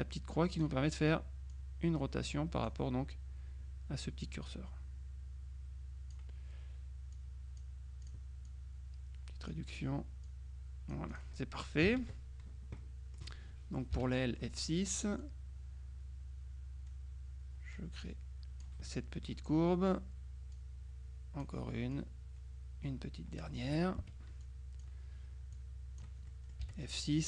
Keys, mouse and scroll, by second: 1.6-3.2 drag, 4.3-6.7 drag, 7.2-8.7 drag, 10.4-11.8 drag, 12.0 KP_Subtract, 12.9 click, 14.0 F6, 14.2 click, 15.3-19.2 drag, 19.0 middle click, 20.7-22.0 drag, 24.1 F2, 24.5 click, 25.6 click, 26.7 F6.